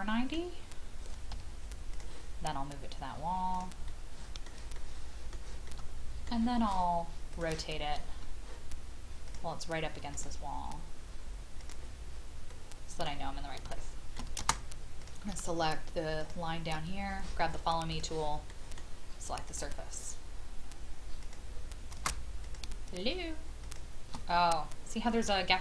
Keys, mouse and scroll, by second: 1.3 m, 1.9 click, 3.8 middle click, 4.7 shift+middle click, 5.6 shift+middle click, 7.3 click, 9.3 shift+click, 10.1 click, 12.5 middle click, 13.2 scroll down 1, 13.7 shift+middle click, 15.0 click, 16.2 shift+click, 17.9 click, 18.5 middle click, 18.7-19.5 scroll up 1, 19.5 click, 23.6 shift+click, 24.4-25.6 scroll up 1.